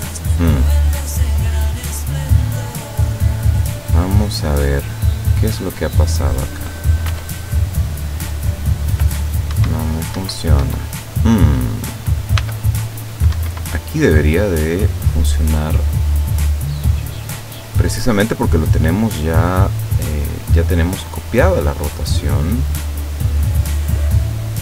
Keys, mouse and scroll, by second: 2.8 right click, 5.1 right click, 7.2 r, 9.6 Escape, 11.6 right click, 12.5 r, 13.4 Escape, 14.4-18.3 middle drag, 18.3 scroll up 1, 18.5-21.1 scroll down 1, 21.1 right click, 22.2 right click, 23.6 right click.